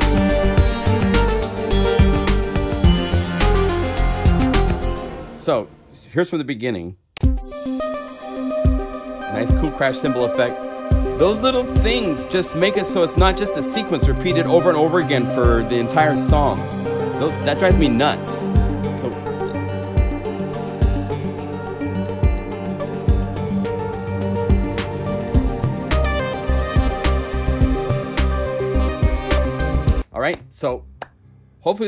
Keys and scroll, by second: 4.7 0, 7.1 Home.